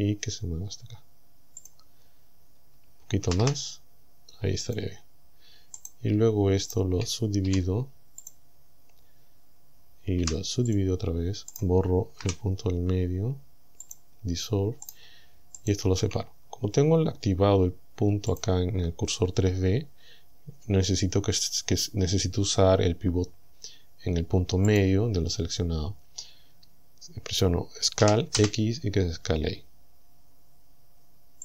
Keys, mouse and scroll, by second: 1.6 click, 2.1-2.6 scroll up 1, 3.3 g, 4.7 click, 5.8 right click, 6.7 shift+right click, 7.5 w, 8.3 click, 10.2 w, 10.7 click, 11.6 right click, 12.2 Delete, 13.9 click, 14.9 shift+right click, 15.6 shift+right click, 18.4 click, 24.7 click, 28.0 s, 28.4 x.